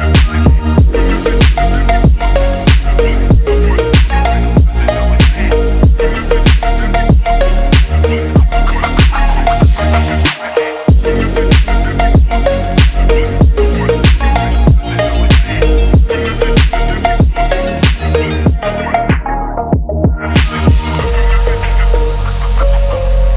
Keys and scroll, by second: 0.3 ctrl+z, 13.4 p, 16.4 ctrl+z, 17.5 Tab.